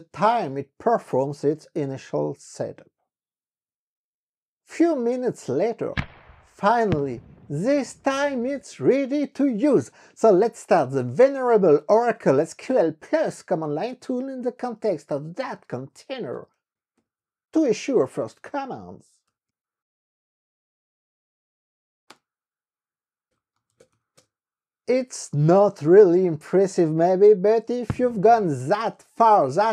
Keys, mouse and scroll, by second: 10.9 ctrl+c, 11.2-20.0 typing, 22.3 KP_Enter, 23.1-24.6 typing.